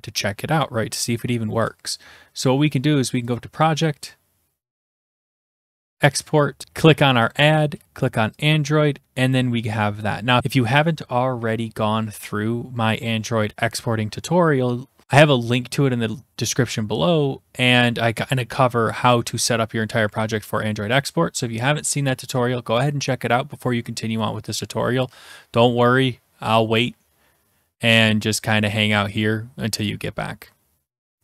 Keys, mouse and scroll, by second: 3.4 click, 5.8 click, 6.7 click, 7.3-9.6 drag.